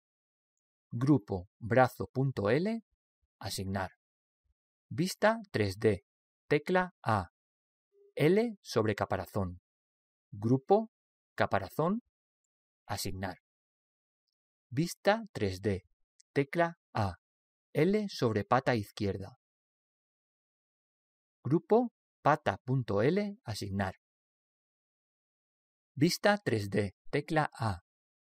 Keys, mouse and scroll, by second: 0.0 l, 2.0 click, 7.3 a, 10.0 l, 11.5 click, 14.4 click, 17.2 a, 20.3 l, 22.6-25.8 drag, 27.8 a.